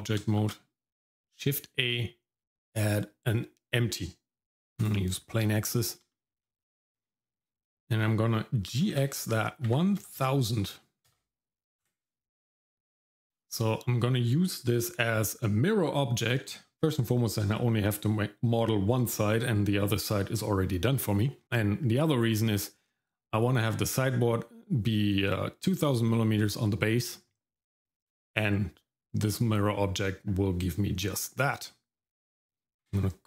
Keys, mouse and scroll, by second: 0.4 shift+a, 5.4-5.9 scroll down 1, 6.1 shift+middle click, 6.6 middle click, 6.9-7.2 scroll up 1, 7.2 middle click, 8.7 g, 13.1-16.2 scroll down 1, 32.8 F2.